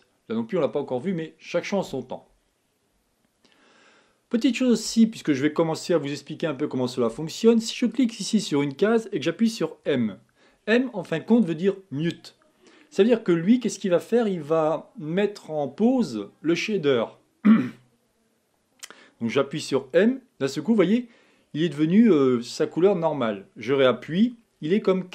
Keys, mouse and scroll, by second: 8.1-10.0 drag, 10.0 m, 20.0 m.